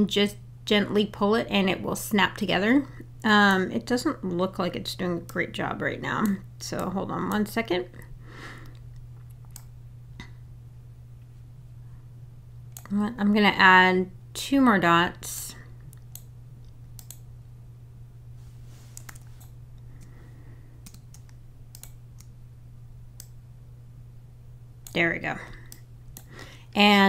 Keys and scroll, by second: 19.1 super+z, 19.5 Caps_Lock.